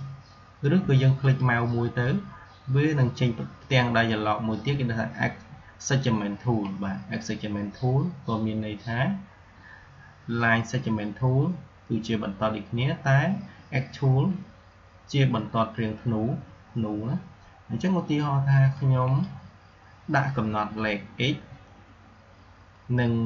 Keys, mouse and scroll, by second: 1.1-6.1 drag, 18.6-21.5 drag.